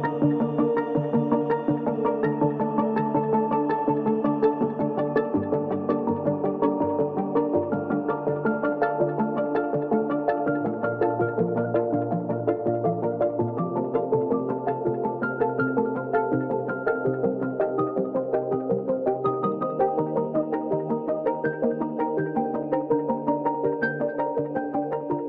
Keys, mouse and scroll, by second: 0.6-3.4 shift+drag, 3.4-4.2 scroll down 1, 4.3-10.7 drag, 11.2 ctrl+click, 11.5 ctrl+space, 12.5 click, 15.5 click, 18.3 shift+click, 18.9 click, 20.5 click, 24.8 ctrl+t.